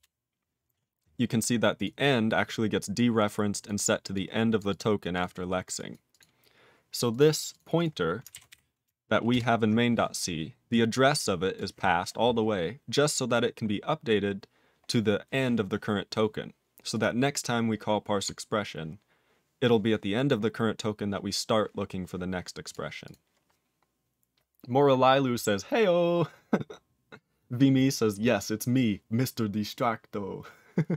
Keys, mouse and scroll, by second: 1.8 click, 2.9 click, 3.6 click, 4.1 click, 4.6 click, 4.7 click, 5.1 click, 5.8 click, 5.9 click, 6.1 click, 7.1 click, 7.5 click, 7.8 click, 9.3 ctrl+Return, 11.5 click, 13.3 click, 16.9 click, 22.7 click, 23.0 click.